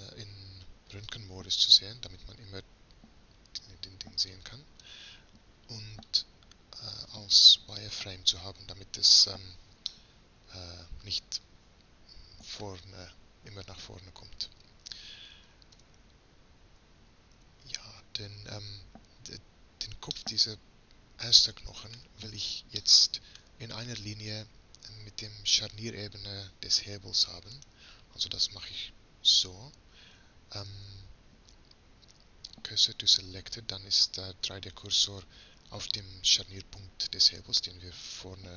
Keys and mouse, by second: 1.0-3.2 drag, 4.3-9.8 drag, 9.9-14.5 middle drag, 14.5-17.4 drag, 15.8 Tab, 17.4 Tab, 20.2-21.8 drag, 21.8-24.8 middle drag, 27.8-29.4 right drag, 30.6 shift+s, 34.3-36.9 middle drag, 37.3-38.5 middle drag.